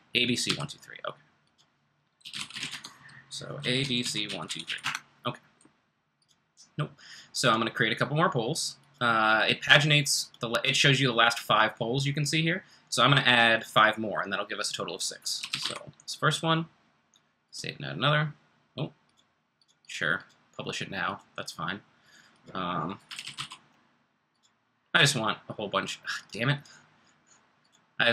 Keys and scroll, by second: 0.4 d, 1.9-3.0 typing, 15.1-16.0 typing, 18.6 typing, 22.8-23.8 typing.